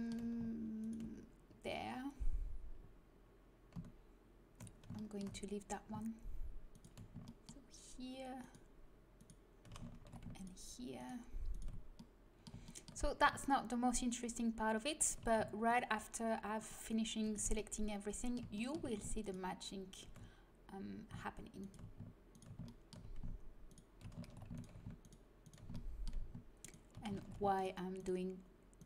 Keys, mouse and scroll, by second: 2.0 right click, 4.6-6.7 middle drag, 6.7-11.8 right drag, 9.9 ctrl+z, 11.8 middle click, 12.3 middle click, 14.9-17.7 right drag, 17.7 middle click, 22.7-24.2 middle drag, 24.2 ctrl+z, 25.7 middle click, 27.1 ctrl+z.